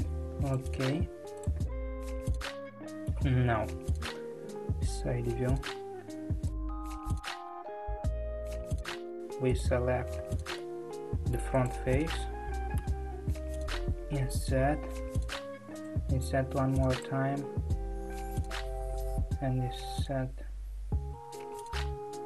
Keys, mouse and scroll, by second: 1.3 click, 2.1-3.7 middle drag, 3.7 KP_3, 4.6-6.6 scroll up 1, 6.6 click, 7.2 click, 8.3 click, 9.6 click, 10.6-11.6 middle drag, 11.6 click, 12.8 KP_3.